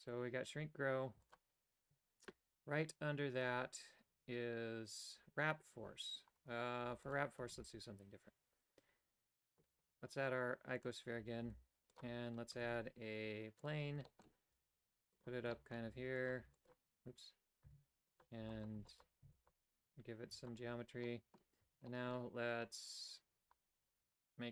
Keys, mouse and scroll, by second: 1.1 w, 1.8 Tab, 3.7 click, 6.4 right click, 6.9 x, 7.5 shift+a, 11.5 g, 12.6 shift+a, 14.1 shift+middle click, 14.5 g, 15.5 shift+middle click, 15.8 w, 16.4 w, 17.0 Tab, 17.6 w, 18.5 w, 18.8 w, 19.2 w, 20.2 w, 21.1 middle click, 21.6 Tab, 21.9 middle click.